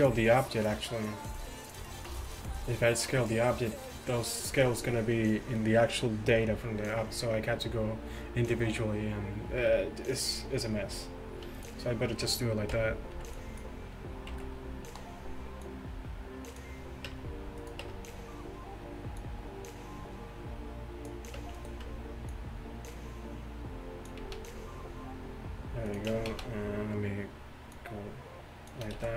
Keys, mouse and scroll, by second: 2.1 b, 11.5 Tab, 12.8 Tab, 13.2 b, 14.4 b, 17.1 Tab, 17.9 Tab, 21.4 Tab, 24.2 z, 26.2 Tab, 26.4 z, 29.0 shift+s.